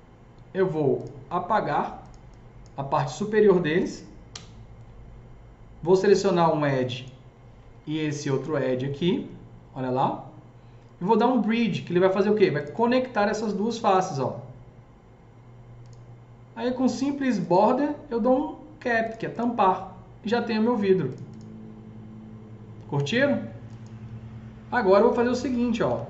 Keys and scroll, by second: 4.2 Delete, 25.4-25.8 typing.